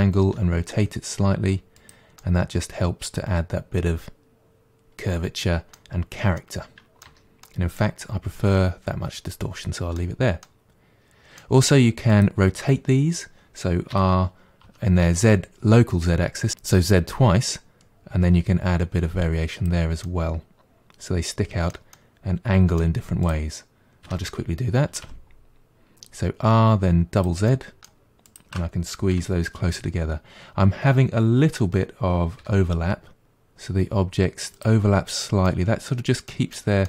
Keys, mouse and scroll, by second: 0.2 r, 2.2-5.2 middle drag, 6.1-6.4 scroll down 1, 6.4 middle click, 7.1 Tab, 7.4-12.1 middle drag, 12.1 click, 13.9 r, 20.1-23.2 middle drag, 23.2 click, 24.1 r, 27.5 middle click, 28.3 click, 29.1 g, 35.5-36.8 middle drag.